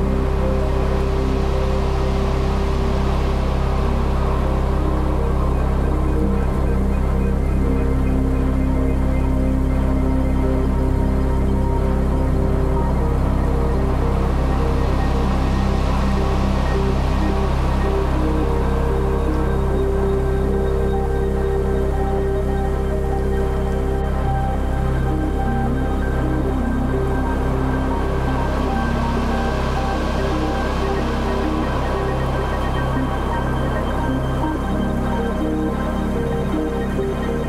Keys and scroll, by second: 0.1 super+z, 0.3 super+space, 1.1-8.1 typing, 9.7-23.5 typing, 25.5 Delete, 35.5 super+i.